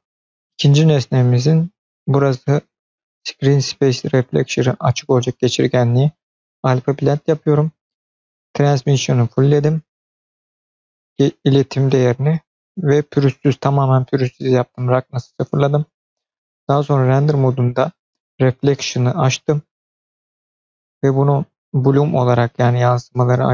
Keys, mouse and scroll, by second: 6.9-9.9 scroll up 4, 12.4-15.1 scroll up 2, 15.1-16.5 scroll up 3, 16.5 click, 16.5 scroll up 1, 19.8 click, 21.0-22.7 scroll up 3, 22.7-23.5 scroll down 2.